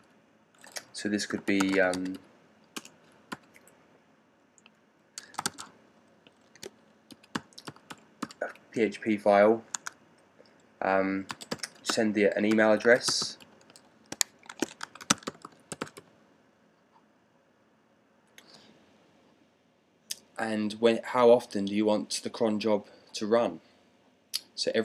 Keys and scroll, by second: 1.2-3.2 typing, 5.1-5.5 typing, 7.0-8.1 typing, 9.6 Tab, 11.2-13.3 typing, 14.4-16.2 typing.